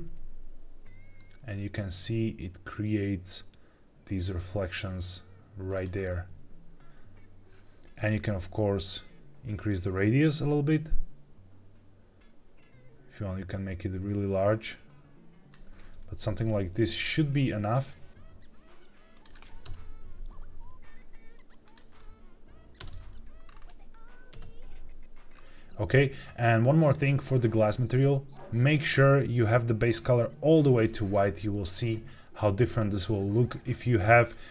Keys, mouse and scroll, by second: 5.7 click, 8.1-15.4 shift+drag, 16.9-17.6 middle drag, 18.1 g, 19.1 click, 19.6 KP_0, 20.4 g, 21.6 click, 22.7 space, 23.4 scroll up 4, 24.5 space, 25.3 scroll down 1, 26.7 click, 28.5 click, 34.1 click.